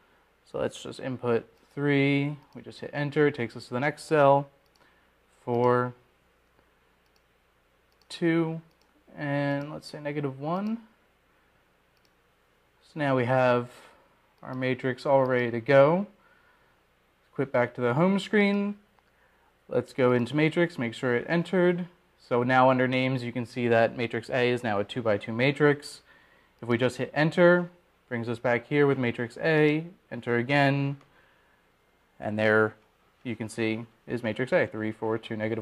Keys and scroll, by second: 4.6 3, 5.2 Return, 7.4 4, 8.4 Return, 10.6 2, 11.5 Return, 13.5 1, 14.7 Return, 29.3 Return, 32.5 Return.